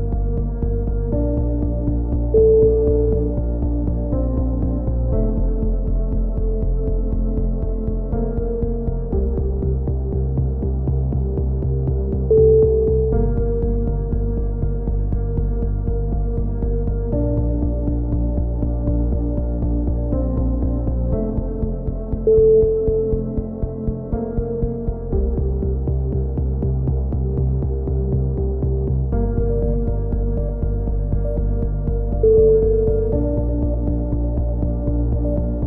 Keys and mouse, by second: 0.6 a, 1.4-4.2 drag, 4.5 click, 4.5 right click, 4.9 a, 5.5-7.0 right drag, 7.2 z, 7.5 c, 8.8 right click, 9.0 x, 9.5 z, 9.7 Tab, 9.8 right click, 10.7 click, 11.8 Tab, 12.4-14.2 drag, 12.4 right click, 12.4 z, 12.5 z, 13.5 z, 13.6 a, 15.5 click, 15.5 z, 16.0 right click, 16.2 x, 16.9 z, 17.3 click, 17.3 z, 18.0-19.4 drag, 18.1 Tab, 21.0 click, 22.6 t, 23.0-24.4 drag, 24.8 t, 25.1 Tab, 25.7 r, 26.5 s, 28.2 Tab, 28.5 click, 30.5 click, 31.0 g, 34.8 Tab, 35.2 Tab, 35.3 a.